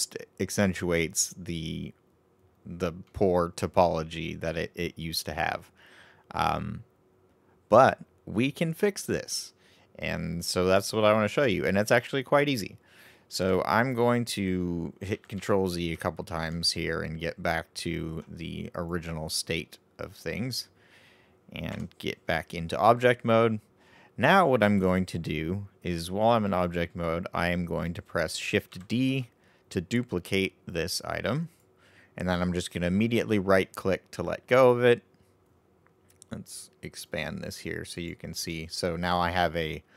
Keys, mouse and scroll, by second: 3.0-6.0 middle drag, 8.8-11.9 middle drag, 15.4 ctrl+z, 15.9 ctrl+z, 16.3 ctrl+z, 18.7-21.7 right drag, 21.7 Tab, 28.9 shift+d, 37.0 click, 37.9 click.